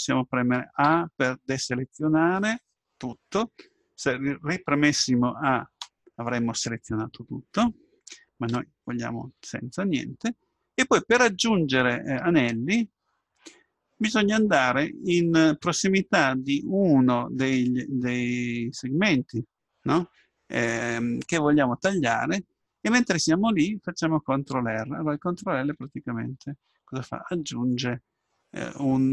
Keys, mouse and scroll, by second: 0.9 a, 5.8 a, 8.5 a, 26.6 ctrl+r.